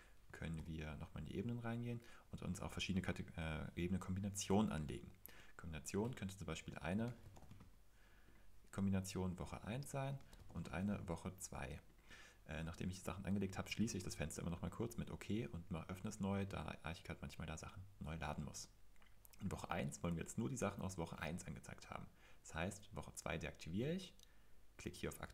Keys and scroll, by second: 0.5 super+l, 6.7-8.1 typing, 9.8-11.3 typing, 13.8 super+l.